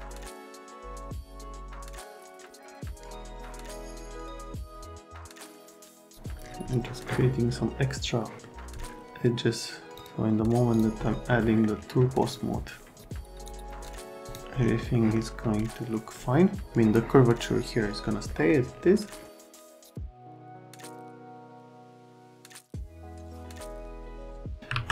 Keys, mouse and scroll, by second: 0.3 click, 0.6 click, 1.1 click, 1.3 right click, 1.7 alt+middle click, 1.9 F3, 2.0 alt+middle click, 2.1 F3, 2.2 middle click, 2.3 middle click, 2.4 alt+middle click, 2.9 F3, 3.2 middle click, 3.3 middle click, 3.5 F3, 3.6 right click, 4.1 right click, 4.3 alt+1, 4.9 click, 5.4 click, 5.6 middle click, 6.1 click, 7.0 middle click, 8.2 right click, 10.0 click, 10.7 click, 11.4 right click, 13.4 middle click, 14.3 middle click, 14.9 right click, 18.3 right click, 19.8 middle click, 20.3 right click, 21.0 click, 21.2 click, 21.9 middle click, 22.2 F3, 22.4 middle click, 22.5 F3, 23.1 middle click, 23.3 middle click, 23.5 F3, 23.7 F3, 24.0 right click, 24.7 alt+1.